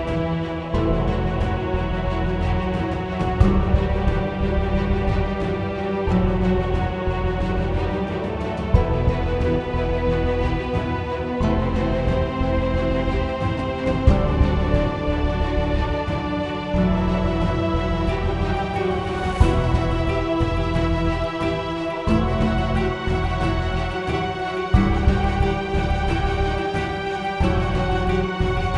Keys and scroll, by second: 19.2-23.1 typing, 23.3 Return, 27.9 s.